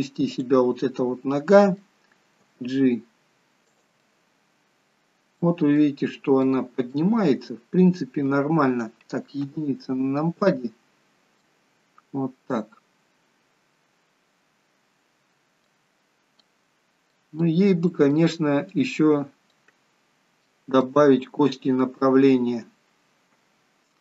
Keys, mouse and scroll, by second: 0.5 click, 1.0 middle click, 2.5 g, 4.1 middle click, 5.9 middle click, 7.0 middle click, 9.5 KP_1, 11.1-11.7 scroll up 2, 11.8 middle click, 16.0 scroll down 2, 16.5 middle click, 17.6 middle click, 19.1 middle click, 20.6 shift+middle click, 20.9 shift+middle click.